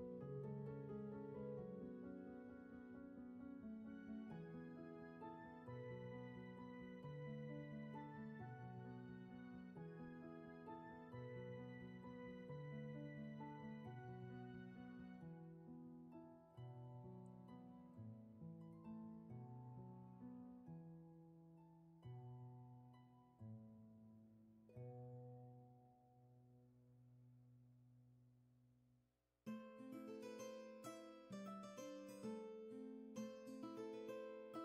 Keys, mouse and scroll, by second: 0.5 ctrl+z, 4.1 ctrl+z, 6.9 ctrl+z, 9.8 ctrl+z, 13.2 ctrl+z, 17.9 ctrl+z, 20.1 ctrl+z, 31.1 scroll down 1, 32.0 space, 34.3 scroll up 1.